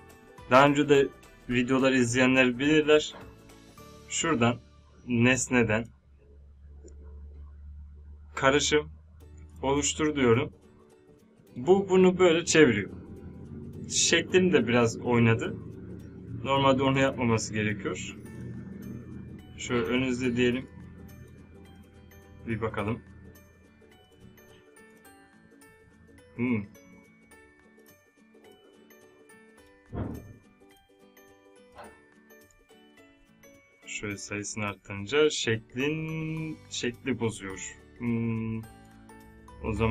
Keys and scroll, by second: 32.5 Up.